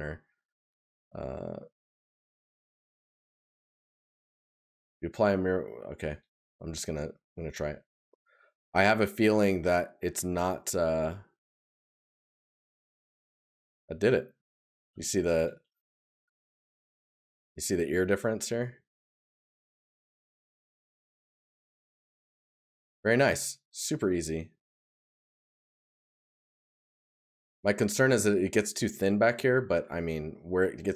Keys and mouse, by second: 6.2 right click, 16.0 right click, 21.5 right click, 22.8 right click.